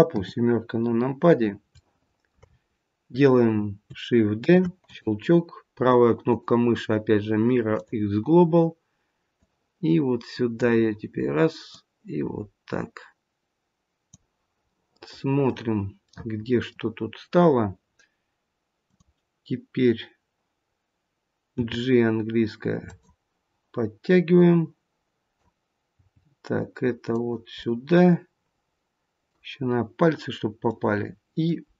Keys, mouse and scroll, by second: 0.0 KP_7, 0.5-1.0 scroll down 1, 1.7 shift+middle click, 1.7 scroll down 2, 2.4 scroll up 3, 4.3 shift+d, 6.2 right click, 9.2 click, 11.6 click, 14.6 middle click, 16.0 middle click, 18.8 click, 21.4 g, 24.3 click, 25.9 g, 27.6 middle click, 29.5 scroll up 2, 30.6 scroll up 1, 30.7 middle click, 31.6-31.7 scroll down 2.